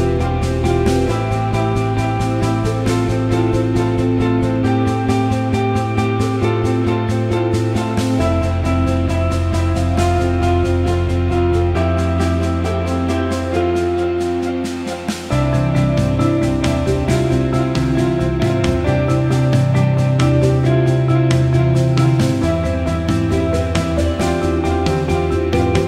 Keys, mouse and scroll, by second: 0.8-7.4 drag, 7.4-10.8 drag, 10.9-12.9 drag, 14.8-18.5 drag, 18.5-21.8 drag, 21.8 Right, 22.6 Down, 22.7 Left, 23.6 click, 24.6 click, 25.2 ctrl+=.